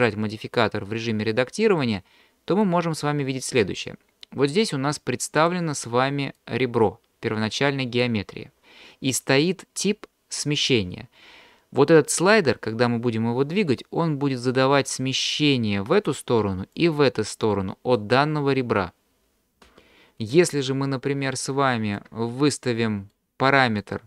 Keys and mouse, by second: 1.8 middle click, 5.4 click, 6.4-8.1 drag, 15.1-16.1 drag, 16.7-18.0 drag, 20.4 d, 20.6-22.1 drag, 22.0 d, 22.1 d, 22.8 d, 23.1 click, 23.8 d.